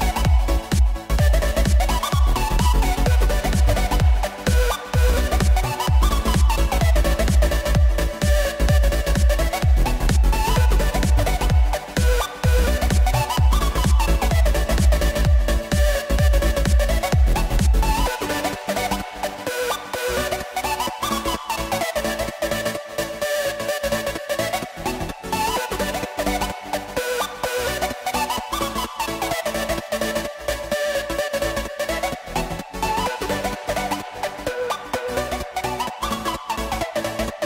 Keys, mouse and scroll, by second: 7.3-8.7 drag, 11.3-12.4 drag, 12.4 scroll up 1, 24.0 KP_0, 27.3 scroll down 1, 32.8 scroll up 2.